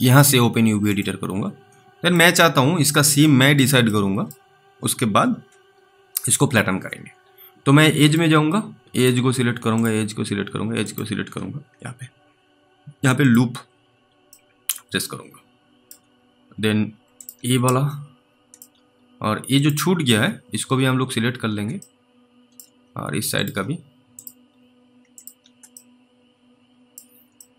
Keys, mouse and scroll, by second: 0.8 click, 1.9 scroll up 1, 2.0 alt+middle click, 2.4-3.0 scroll up 2, 4.1 alt+middle click, 8.0 middle click, 8.1 click, 9.8 ctrl+click, 14.6 alt+middle click, 17.2 ctrl+click, 17.9 alt+middle click, 19.6 ctrl+click, 22.1 alt+middle click, 23.4 ctrl+click, 25.2 ctrl+click, 26.0 alt+middle click.